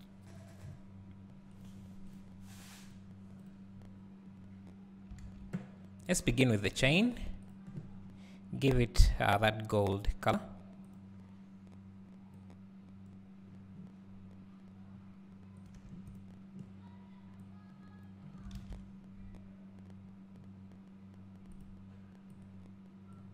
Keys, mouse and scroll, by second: 4.3-4.8 scroll up 1, 4.8-6.1 scroll down 1, 7.7 click, 18.5-23.3 drag, 18.6 alt+a, 18.8-20.1 scroll up 2, 20.1-22.3 scroll up 1.